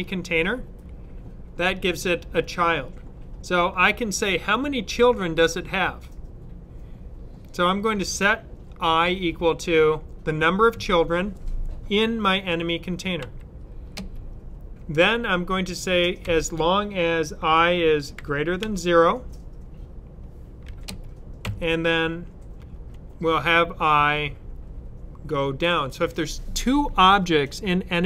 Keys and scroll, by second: 13.1 ., 16.1 typing, 18.0-18.5 typing, 20.5-21.3 typing, 22.4-22.8 typing, 25.3 typing.